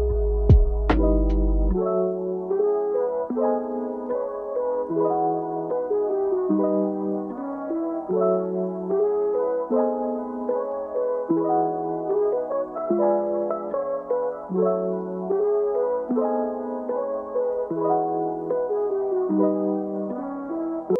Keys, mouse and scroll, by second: 0.0-4.5 typing, 0.0 Tab, 0.1 click, 0.5 middle click, 1.1 middle click, 1.2 Tab, 1.3 right click, 1.4 click, 1.5 middle click, 1.5 scroll down 2, 1.9 click, 2.0 middle click, 2.6 shift+middle click, 3.0 scroll up 2, 3.2 scroll down 4, 3.4 middle click, 3.7 middle click, 3.9 click, 4.1 middle click, 4.3 ctrl+z, 4.4 scroll down 1, 4.9 scroll up 8, 5.1 click, 5.3 Delete, 5.5 shift+middle click, 5.6 click, 6.1 click, 6.7 Tab, 6.8 middle click, 6.9 click, 7.4 scroll down 2, 10.2 click, 10.3 middle click, 10.5 g, 10.6 middle click, 10.9 scroll down 2, 11.0 click, 11.1 shift+middle click, 11.3 scroll up 2, 11.5 shift+middle click, 11.5 scroll down 2, 11.7-13.2 typing, 12.4 scroll up 1, 12.5 alt+click, 12.9 shift+middle click, 13.0 scroll up 1, 13.3 ctrl+r, 13.8 scroll up 2, 13.9 click, 14.2 e, 14.4 middle click, 14.5 click, 14.6 right click, 14.8 Tab, 14.9 middle click, 15.0 s, 15.2 alt+shift+click, 15.3 middle click, 15.4 Tab, 15.6 middle click, 15.7 KP_1, 15.9 ctrl+r, 16.0 Tab, 16.2 middle click, 16.4-18.1 scroll up 5, 16.4 middle click, 16.6 g, 18.1 middle click, 19.4 click, 19.6 click, 19.9 scroll down 4, 20.0 KP_7, 20.1 scroll up 1, 20.3 a, 20.8 a.